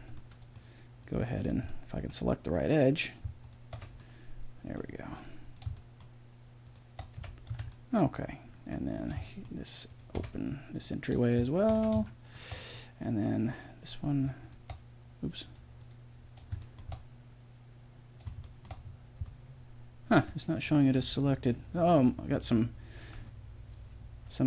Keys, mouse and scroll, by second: 3.7 f, 7.2 f, 7.6 a, 9.4 middle click, 10.2 f, 11.8 f, 13.4 middle click, 16.6 middle click, 17.9 middle click, 18.4 middle click, 18.8-20.2 middle drag, 20.2 a, 20.6-22.6 drag, 21.0 g, 22.6 middle click.